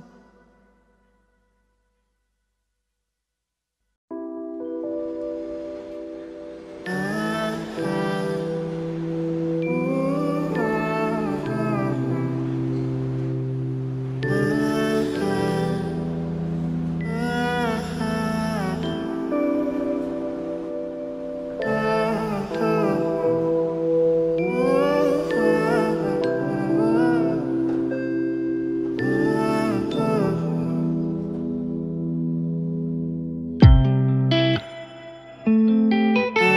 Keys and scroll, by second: 10.1 ctrl+v.